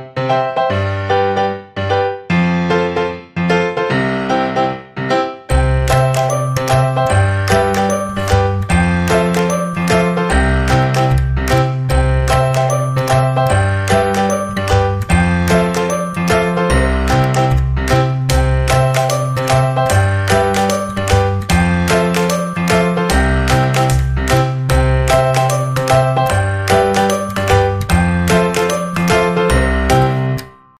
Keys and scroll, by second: 10.3 space, 20.1 space, 22.8 -.